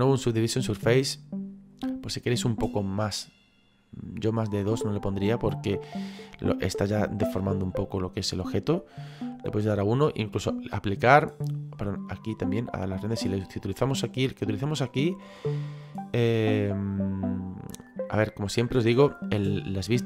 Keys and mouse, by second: 0.4 click, 1.9 middle click, 4.2 click, 8.3 click, 9.6 middle click, 12.3 click.